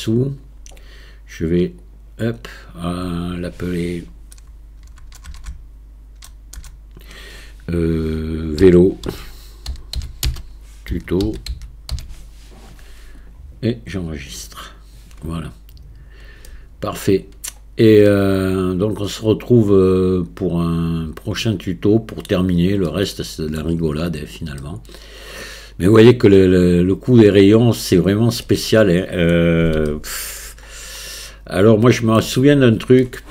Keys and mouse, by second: 16.5-17.1 middle drag, 18.1-22.3 middle drag, 22.9-23.6 middle drag, 24.6-27.8 middle drag, 28.5-29.3 middle drag, 29.9-30.4 shift+middle drag, 31.1-32.2 middle drag, 33.0 shift+middle click.